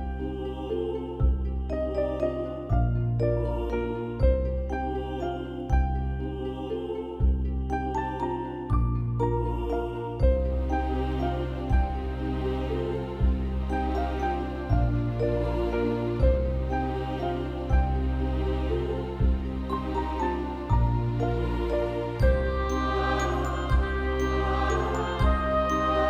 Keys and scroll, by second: 1.7 ctrl+v, 3.0 ctrl+BackSpace, 4.3 ], 15.9 ctrl+BackSpace, 24.0 ctrl+=, 24.1 ctrl+-, 24.7 ctrl+=.